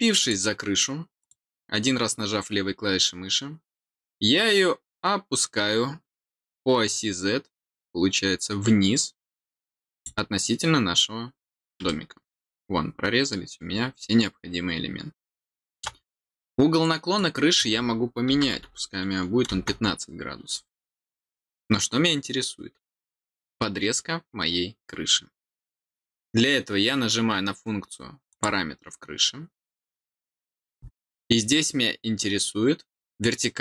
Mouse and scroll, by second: 0.1 click, 1.1 click, 9.8 click, 11.8-15.8 middle drag, 17.1 click, 28.2 click.